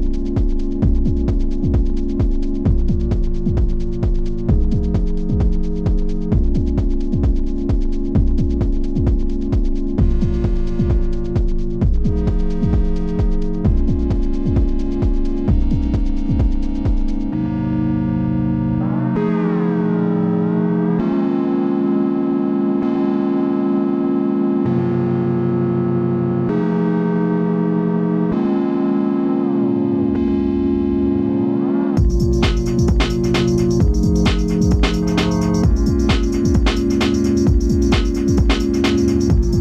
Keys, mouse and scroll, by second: 9.5 click, 10.1 z, 10.5-12.7 drag, 14.2-15.2 shift+drag, 16.0 alt+shift+click, 17.6 alt+shift+click, 18.8 alt+shift+click, 20.1-24.2 alt+shift+drag, 25.0 alt+shift+click, 26.1-28.7 drag, 28.7-31.7 drag, 36.1 right click, 36.6 click, 38.7 click.